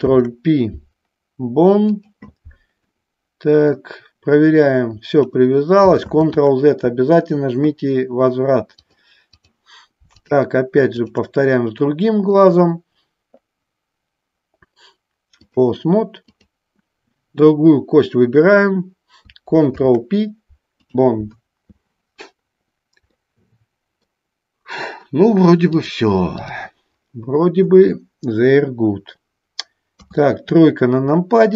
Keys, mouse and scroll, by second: 0.1 ctrl+p, 3.1 middle click, 4.5 click, 6.1 ctrl+z, 8.9 click, 11.1 shift+click, 12.5-15.8 drag, 16.5-18.7 drag, 19.7 ctrl+p, 23.2 middle click, 25.9 click, 30.1 KP_3.